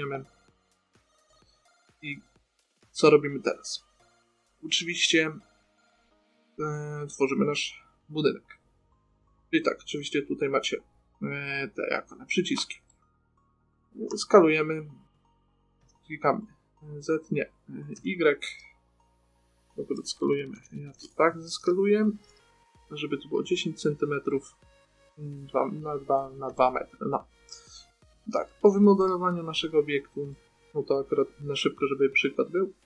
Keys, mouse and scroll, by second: 1.6 middle click, 7.1-9.0 middle drag, 9.7 middle click, 12.8 middle click, 14.4 s, 22.4 t, 22.6 n, 24.6 middle click, 26.7 middle click, 27.5 middle click, 29.0-31.9 middle drag.